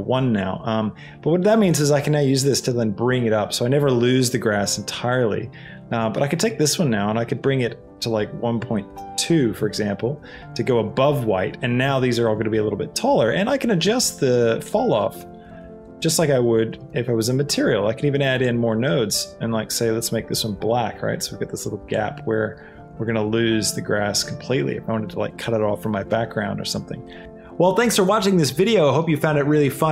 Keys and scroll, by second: 8.9 Return.